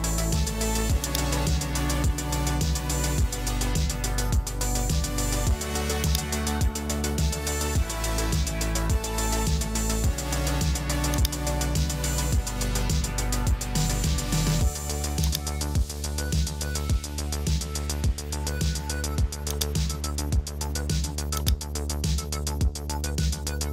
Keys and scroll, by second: 1.7 super+a, 2.6-3.8 typing, 3.4 Return, 8.8 super+s, 13.1 super+s.